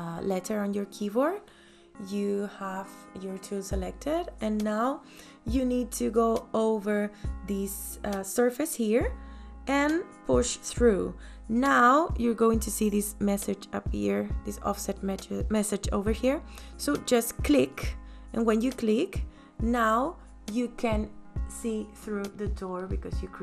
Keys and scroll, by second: 0.6 p, 20.3 space.